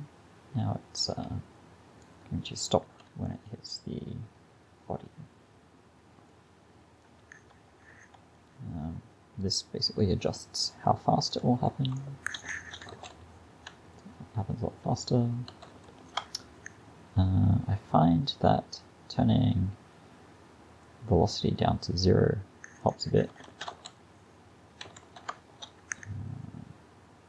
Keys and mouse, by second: 2.9 alt+a, 3.4 drag, 4.1 click, 11.3-12.6 drag, 12.6 shift+Left, 13.0 alt+a, 15.6 alt+a, 16.0 shift+Left, 20.9-23.5 drag, 23.5 shift+Left, 23.8 alt+a, 25.0 alt+a, 25.4 shift+Left.